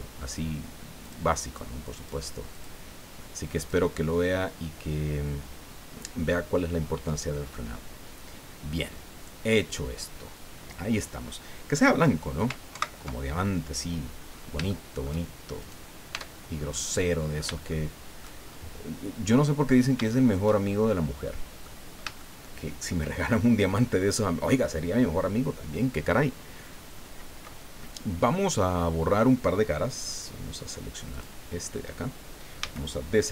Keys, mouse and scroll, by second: 1.1 click, 1.4 click, 2.0 click, 2.5 click, 3.6 click, 8.5-9.1 scroll down 4, 12.7 ctrl+Right, 14.3-14.6 scroll up 3, 14.7 shift+click, 15.6 right click, 16.1 Tab, 16.7 click, 17.7 shift+click, 18.7 scroll up 2, 19.0 scroll down 2, 19.7 scroll down 3, 20.1-21.8 shift+drag, 22.2 shift+middle click, 31.1 click, 32.6 a.